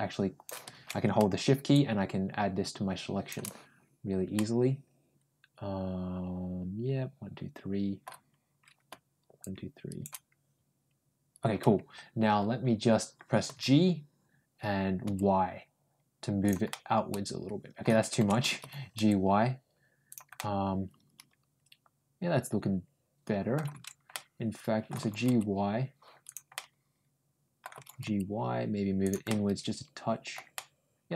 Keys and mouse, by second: 1.6-3.1 ctrl+shift+drag, 4.2-7.9 ctrl+middle drag, 9.2 shift+click, 13.3 g, 16.5-17.7 middle drag, 18.4 ctrl+g, 20.2-23.4 middle drag, 24.0 ctrl+middle click, 24.8 ctrl+g, 26.4-27.4 middle drag, 27.6 g, 29.1-30.2 middle drag, 30.4-31.1 middle drag.